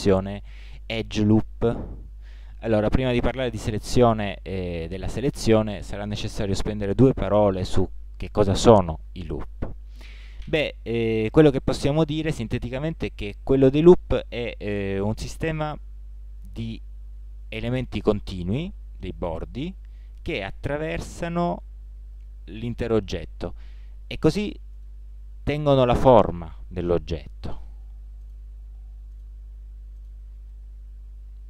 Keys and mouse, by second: 7.7-10.9 middle drag, 11.7-16.2 middle drag, 20.0 middle click, 24.8-26.7 middle drag, 26.9 middle click, 31.2 middle click.